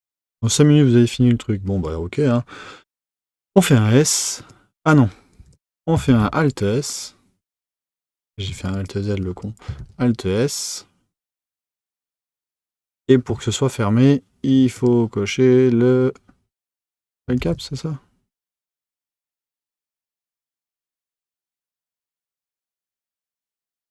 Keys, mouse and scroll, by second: 1.6 click, 3.4 s, 5.5 z, 8.7 click, 9.8 alt+s, 14.7 click, 17.4 alt+s.